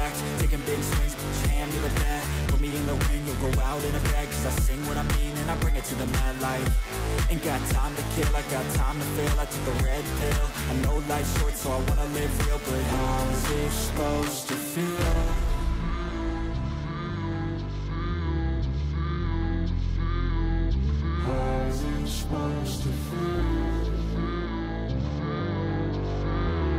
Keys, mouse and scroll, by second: 0.2 double click, 12.5 click, 13.4 click, 16.0 ctrl+z, 22.3 ctrl+z, 23.6 ctrl+z, 26.6 scroll down 1.